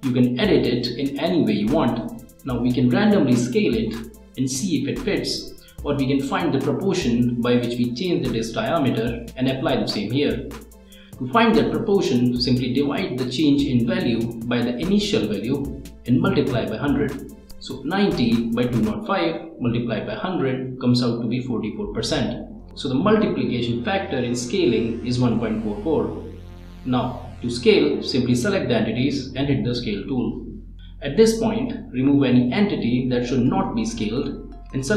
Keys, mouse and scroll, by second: 1.6 2, 3.7 Return, 6.2-8.2 drag, 9.5 click, 15.3 click, 21.0 click, 22.9-26.3 drag, 27.4 click, 28.6 click, 30.4 click, 31.0 click, 31.9 click, 33.7 click, 34.2 click.